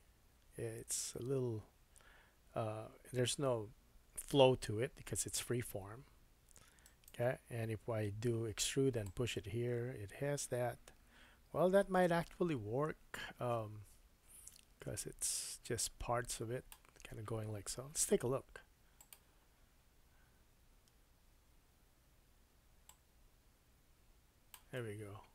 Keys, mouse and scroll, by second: 9.0-22.0 drag, 21.7 Tab, 22.8 click, 23.6-25.3 drag, 24.7 middle click.